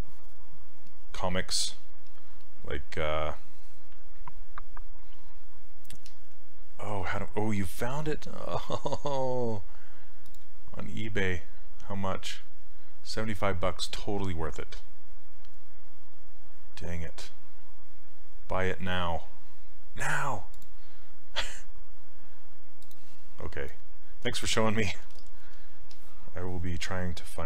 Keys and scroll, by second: 1.7 s.